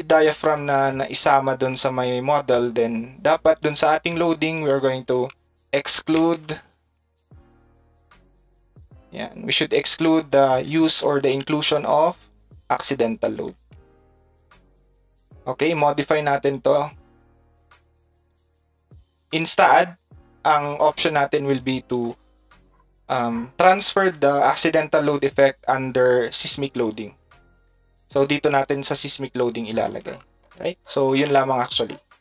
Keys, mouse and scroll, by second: 1.5 click, 3.6 click, 4.5 click, 9.8 click, 11.6 ctrl+click, 12.3 ctrl+click, 13.0 ctrl+click.